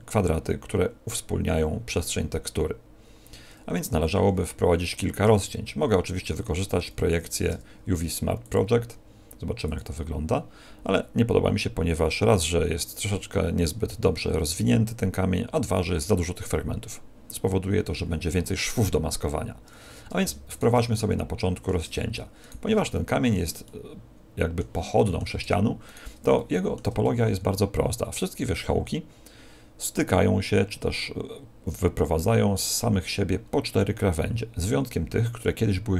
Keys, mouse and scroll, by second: 4.2 a, 6.7 a, 7.4 u, 11.6-12.6 scroll down 1, 19.8 a, 20.5 alt+shift+right click, 20.9 middle click, 22.4 alt+shift+right click, 22.9 middle click, 23.6 middle click, 24.9 middle click, 25.8 alt+shift+right click, 26.3 shift+middle click, 33.4 scroll up 1, 35.1 scroll up 2.